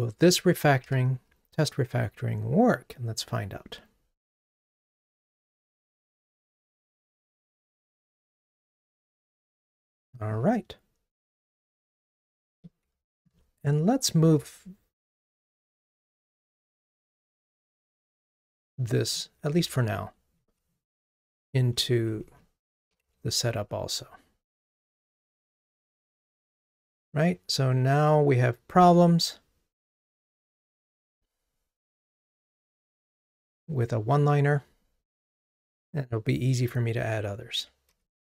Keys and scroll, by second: 0.8 ctrl+r, 13.2 super+BackSpace, 19.8 super+x, 24.3 super+v, 28.8 ctrl+r, 37.9 super+k.